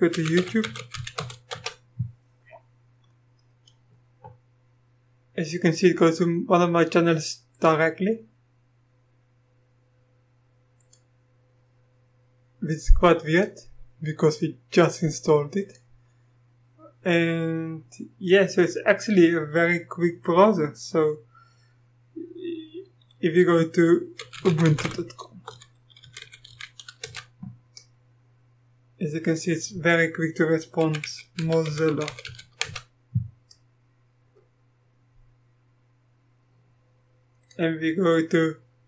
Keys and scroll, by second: 0.0-1.9 typing, 23.9-27.0 typing, 27.0 Return, 30.6-32.8 typing.